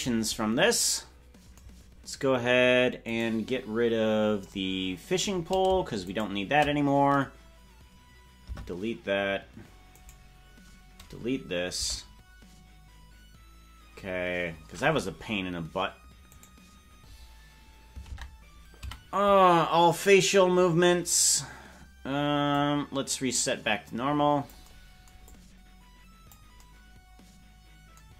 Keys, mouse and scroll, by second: 3.1 right click, 6.1 shift+right click, 8.9 Delete, 10.0 right click, 12.2 Delete, 14.8-15.7 scroll up 5, 16.3 right click, 18.1 ctrl+Tab, 18.8 a, 22.6-24.7 drag, 25.3-26.4 drag.